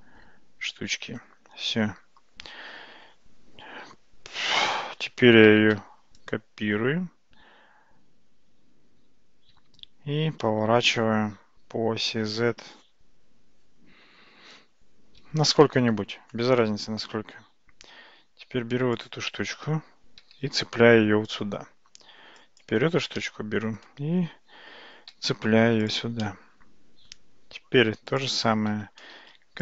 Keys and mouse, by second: 1.9 Tab, 5.8 shift+d, 11.8 r, 18.0 Tab, 18.9 click, 20.2 g, 22.6 click, 23.2 middle click, 25.2 g, 26.2 middle click, 27.8 Tab, 29.4 shift+d.